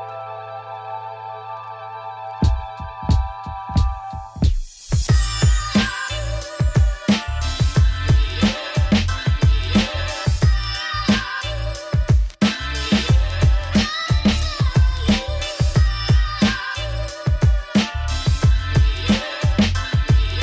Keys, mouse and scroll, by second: 0.8 click, 1.0 shift+click, 1.2 shift+click, 1.8 click, 2.5 ctrl+shift+click, 2.9 middle click, 3.0 g, 5.0 middle click, 5.3 click, 5.4 2, 5.9 click, 6.2 ctrl+click, 6.4 middle click, 6.6 g, 7.9 2, 8.0 click, 8.2 shift+click, 8.3 shift+click, 8.5 shift+click, 8.7 middle click, 9.2 ctrl+b, 11.3 click, 11.9-12.2 scroll up 2, 12.2 click, 12.4 g, 14.0 Tab, 14.4 KP_Divide, 14.7 click, 14.8 Tab, 15.0 a, 15.2 m, 15.9 Tab, 16.1 click, 16.4 middle click, 16.8 scroll up 3, 17.4 Tab, 17.7 middle click, 17.8-18.2 scroll down 1, 18.2 middle click, 18.8 click, 19.0 shift+click, 19.1 shift+click, 19.3 shift+click, 19.4 shift+click, 19.6 middle click, 19.8 g.